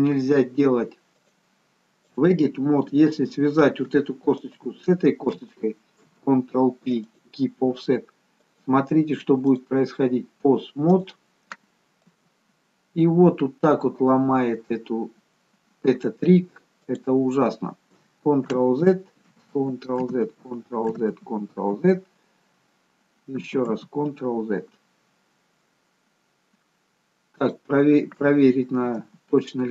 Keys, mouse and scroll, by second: 1.3 click, 4.4 shift+click, 6.1 ctrl+p, 8.5 click, 11.0 click, 12.2 g, 18.7 ctrl+z, 19.7 ctrl+z, 21.2 ctrl+z, 23.6 ctrl+z, 27.5 click, 29.1 g.